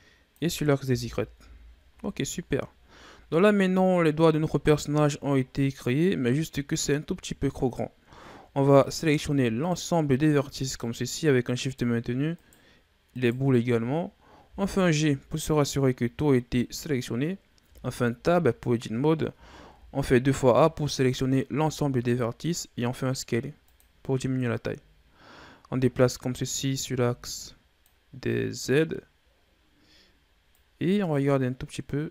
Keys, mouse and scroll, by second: 0.7 KP_1, 1.3 Tab, 1.8 scroll down 2, 2.6-3.1 scroll down 4, 3.2 scroll down 1, 3.5-3.9 scroll up 4, 4.6-5.2 ctrl+scroll up 4, 5.2-6.4 scroll down 3, 6.4-7.2 scroll down 1, 7.2-8.0 scroll up 5, 8.0-8.7 scroll up 1, 8.7 right click, 9.4 shift+right click, 10.4 shift+right click, 11.5 shift+right click, 12.2 shift+right click, 12.9 shift+right click, 14.3 g, 17.0 scroll down 3, 17.6 Tab, 18.6 scroll up 2, 19.2 a, 19.6 a, 21.4 s, 24.5-27.6 drag, 30.4-32.1 drag.